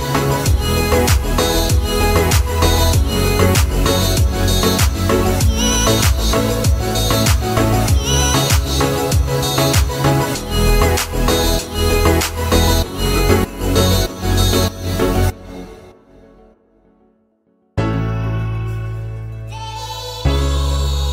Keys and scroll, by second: 4.8 2, 5.3 Return, 7.6 Escape, 12.7 o, 15.5 Escape.